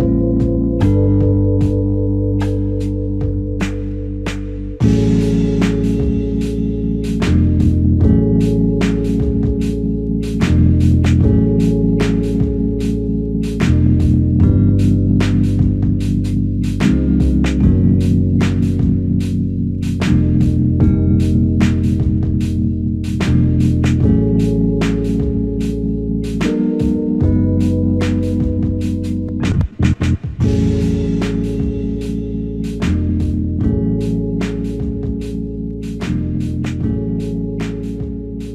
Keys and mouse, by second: 0.0 shift+click, 4.5 shift+click, 6.5 alt+click, 8.5 f, 13.2 double click, 15.7 shift+click, 17.3 shift+click, 19.7 alt+click, 20.7 shift+click, 21.8 alt+click, 22.9 shift+click, 23.5 alt+click, 28.5 alt+click, 29.3 f, 30.5 alt+shift+click, 31.1 alt+shift+click, 31.1 alt+click, 33.2 double click, 36.2 double click, 36.4 shift+click.